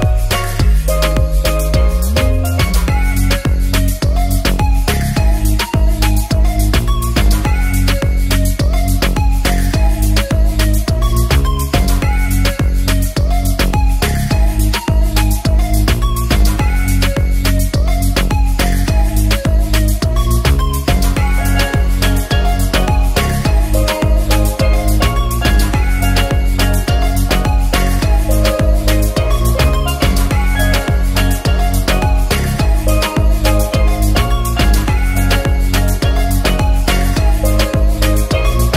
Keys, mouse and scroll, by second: 0.5 drag, 4.1 drag, 7.0 drag, 7.8 ctrl+s, 8.6 click, 11.3 click, 11.6 alt+middle drag, 12.3 ctrl+s, 12.5 click, 12.9 click, 13.4 drag, 15.4 click, 15.6 shift+a, 15.6 middle click, 16.7 click, 17.1 drag, 17.8 drag, 19.5 click, 20.3 drag, 21.3 click, 25.4 ctrl+s, 25.5-25.9 shift+middle drag, 25.5 shift+a, 26.2 drag, 26.5 shift+a, 26.5-27.0 alt+middle drag, 29.8 click, 30.6 middle click, 30.6 shift+a, 31.3 click, 31.8 click, 36.1 shift+a, 36.3 middle click, 37.0 ctrl+s, 37.2-37.6 alt+drag, 37.7-38.2 alt+drag, 38.3 `.